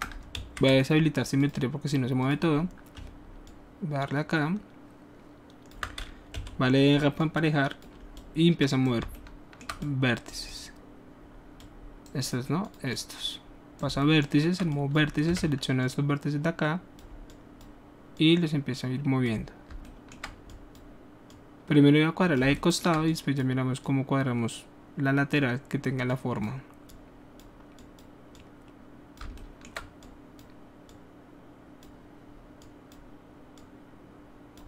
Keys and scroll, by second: 0.1 ctrl+alt+shift+w, 0.3 ctrl+alt+shift+z, 6.3 shift+r, 15.2 w.